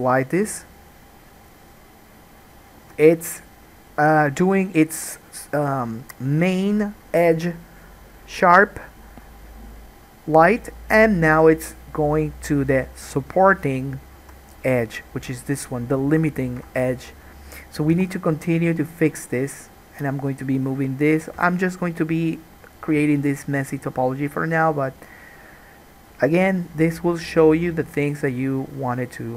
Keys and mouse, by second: 3.0 alt+a, 13.3-14.3 drag, 14.3 2, 14.5 click, 14.6-18.8 middle drag, 16.8 alt+a, 18.1 1, 18.8-29.3 drag, 21.5 k.